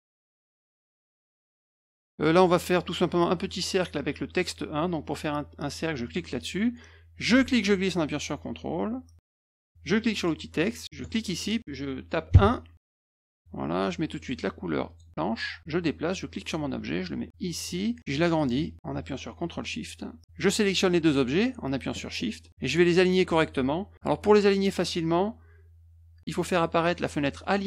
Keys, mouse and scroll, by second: 1.6 click, 6.0 click, 7.2-9.5 drag, 10.1 click, 11.0 click, 12.3 1, 13.2 click, 14.8 click, 16.3-17.6 drag, 18.1 middle click, 18.8 click, 20.4 click.